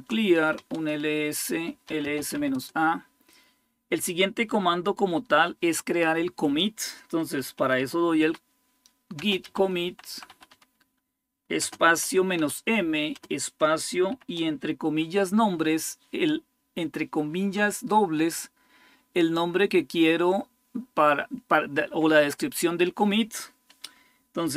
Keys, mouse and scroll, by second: 0.0-2.6 typing, 6.9-13.9 typing.